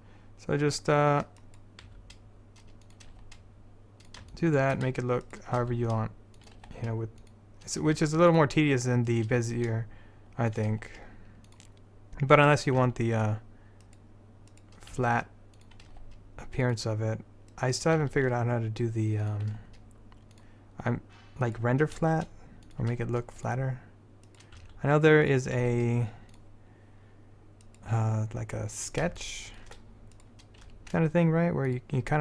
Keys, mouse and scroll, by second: 2.0 s, 3.2 g, 5.4 click, 5.7 s, 6.7 g, 8.0 s, 9.5 s, 10.9 g, 12.9 s, 15.1 s, 16.0 g, 16.8 click, 18.1 s, 19.6 g, 22.1 s, 23.1 g, 23.5 click, 24.7 s, 25.7 g, 26.3-27.8 drag, 29.4-30.8 middle drag, 30.8 click, 30.8 g.